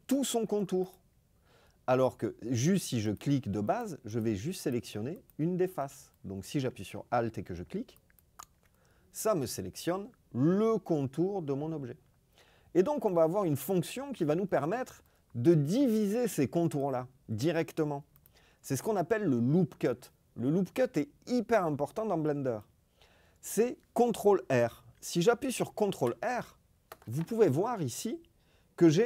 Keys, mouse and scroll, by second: 0.8 click, 3.0 click, 3.7 click, 4.0 click, 4.5 click, 7.9 alt+click, 16.6 right click, 18.1 click, 25.7 ctrl+r.